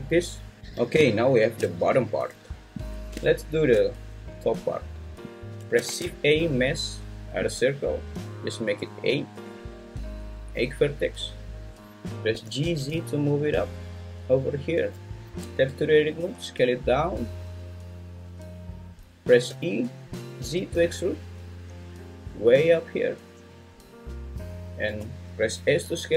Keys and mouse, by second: 0.6 `, 0.6 n, 5.9 shift+a, 8.7 click, 12.3 g, 12.6 z, 14.6 click, 15.4 Tab, 16.2 s, 19.5 e, 20.4 z, 24.9 s.